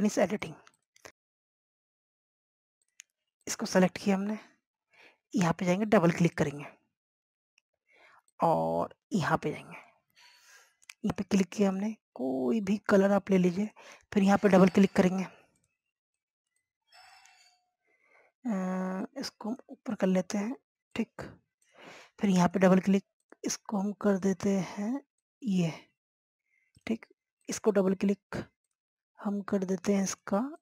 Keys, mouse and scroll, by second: 0.2 scroll down 1, 0.5 scroll up 1, 1.5-30.6 drag.